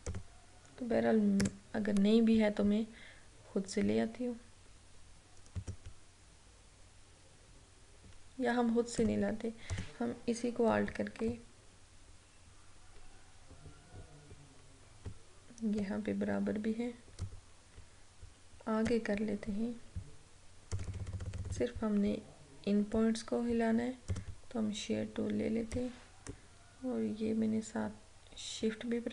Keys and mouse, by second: 0.2 click, 5.6 click, 9.1 click, 11.4-20.7 alt+drag, 24.1-29.1 drag.